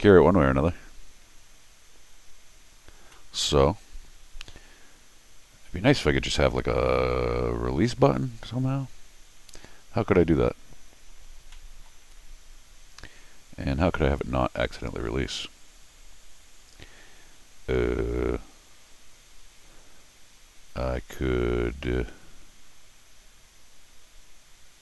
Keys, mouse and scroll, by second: 3.1-6.0 middle drag, 9.8 scroll down 2, 10.2-10.5 scroll up 2, 10.7 scroll down 1, 10.8 scroll up 1, 11.5 middle click.